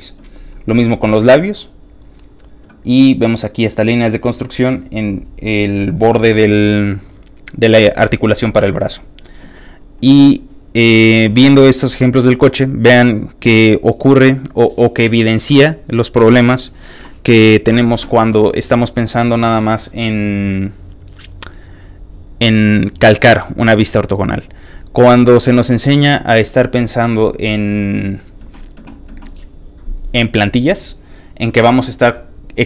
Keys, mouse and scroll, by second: 18.6-21.7 alt+drag, 24.2-25.7 alt+drag, 26.4-28.0 alt+drag.